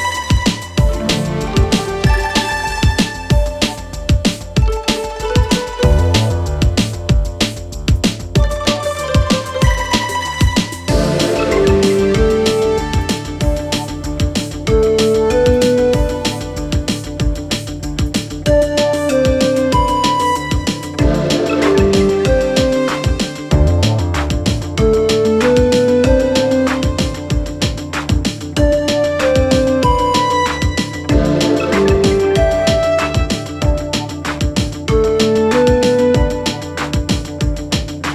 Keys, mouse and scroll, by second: 0.1-2.3 typing, 3.0 click, 5.7 click, 7.0 click, 9.2 click, 11.2 click, 16.6 right click, 18.4 click, 20.7-21.4 click, 25.0 shift+b, 26.4 click, 28.3-28.7 click, 31.6 click, 33.2 ctrl+d, 34.7-36.0 click.